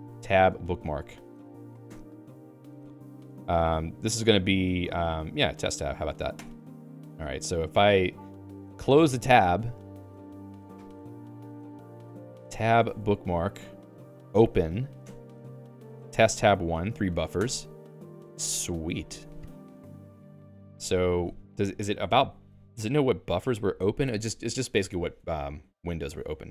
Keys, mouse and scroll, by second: 10.8 click, 12.1 alt+x, 12.2-13.6 typing, 14.0 ctrl+j, 14.3 ctrl+j, 15.1 Return.